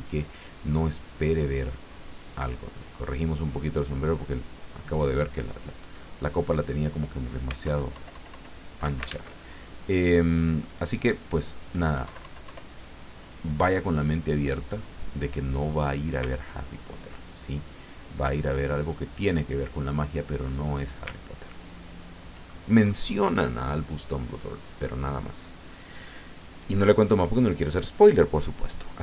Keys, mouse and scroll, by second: 0.0 click, 0.7-3.0 drag, 3.7 click, 6.5 click, 7.6 alt+Down, 9.1 ctrl+alt+z, 12.0 Down, 14.3 click, 15.7 click, 16.4-17.0 ctrl+scroll up 2, 17.6-19.7 drag, 20.5 click, 21.4-21.9 ctrl+scroll down 2, 22.5 ctrl+click.